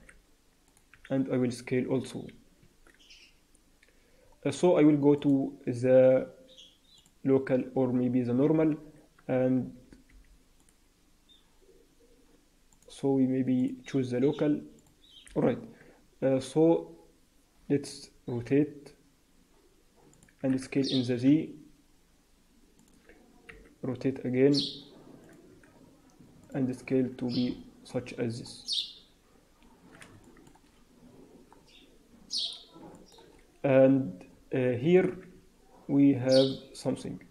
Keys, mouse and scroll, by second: 0.9 s, 5.1 click, 9.5 t, 9.7 t, 10.0 t, 10.5 click, 12.6 click, 18.3 r, 20.3 s, 25.4 r, 25.4 s, 26.7 Tab, 27.1-27.8 scroll down 8, 27.7-28.4 scroll up 5, 28.4-29.7 scroll down 1, 29.7-30.0 scroll down 1, 30.1 shift+middle click, 30.5-31.5 scroll up 2, 31.5-32.0 scroll down 2, 32.0-32.7 scroll up 1, 32.7 scroll up 1, 32.9 shift+middle click, 33.2-33.8 scroll up 2, 33.8-34.9 scroll down 6, 34.5-35.6 scroll up 5, 35.3 Tab, 35.9 Tab, 36.1-37.3 scroll down 1.